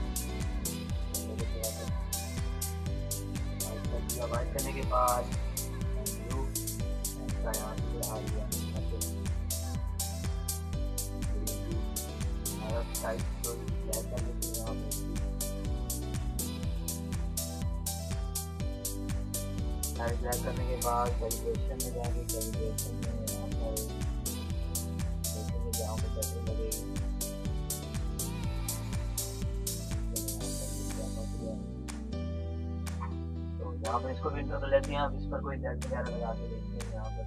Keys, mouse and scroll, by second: 0.7-4.8 drag, 5.9-7.1 drag, 7.4-9.6 drag, 32.6 Return, 35.7 click.